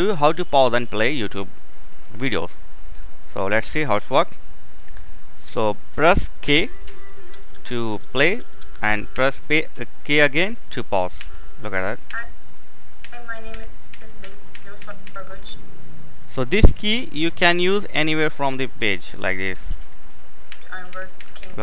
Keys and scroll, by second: 5.7 k, 8.4 k, 11.2-14.7 typing, 16.3-17.1 typing, 19.6-21.6 typing.